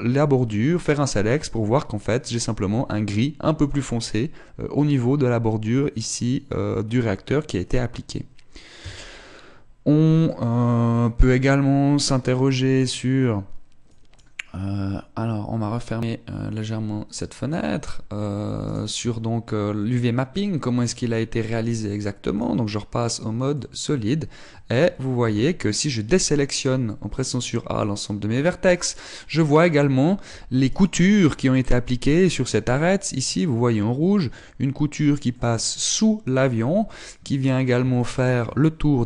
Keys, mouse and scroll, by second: 1.3 click, 9.3 Tab, 9.7-10.4 scroll down 3, 10.8 middle click, 11.6-12.0 scroll down 2, 12.8 middle click, 14.4 click, 16.3 click, 19.3 right click, 19.6 Tab, 20.0-20.9 scroll up 4, 20.9 middle click, 22.2 click, 24.3 middle click, 25.1 Tab, 25.6 Tab, 26.0 a, 28.1 middle click, 29.6 middle click, 31.3 alt+right click, 34.3 middle click, 35.9 middle click, 36.5 middle click, 37.1 middle click, 37.9 middle click, 38.6 shift+middle click.